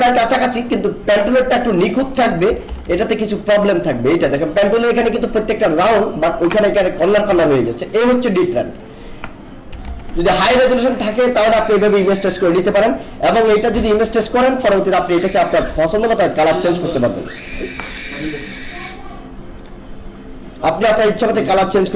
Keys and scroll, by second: 2.5 ctrl+=, 9.9 ctrl+-.